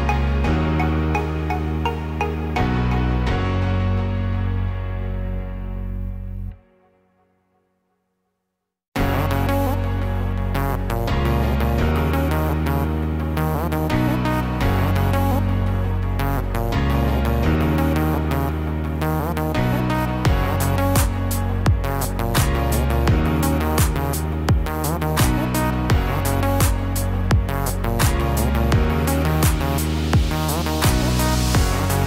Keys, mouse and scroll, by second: 2.1 click, 3.2 g, 4.8 click, 5.8 g, 8.9 scroll up 2, 10.2 ctrl+r, 21.9 click, 22.9 g, 25.3 click, 26.7 g, 30.8 click.